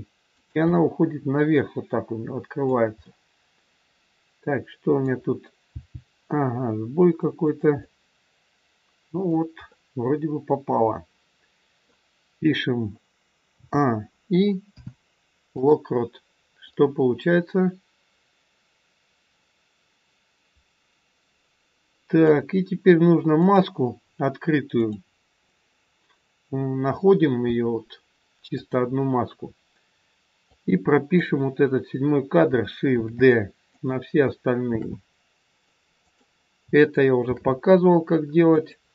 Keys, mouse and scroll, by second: 0.6 scroll up 1, 0.7 middle click, 5.7 g, 7.8 middle click, 13.4 a, 14.7 i, 16.5 click, 23.4 click, 24.7 click, 28.6 click, 30.4 click, 32.9 shift+d, 34.7 shift+d.